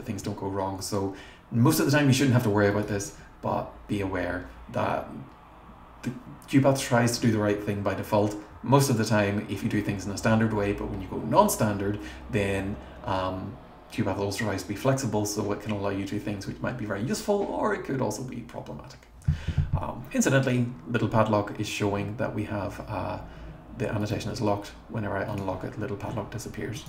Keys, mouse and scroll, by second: 2.7 click, 2.9 click, 24.0 right click, 25.3 click, 26.7 right click.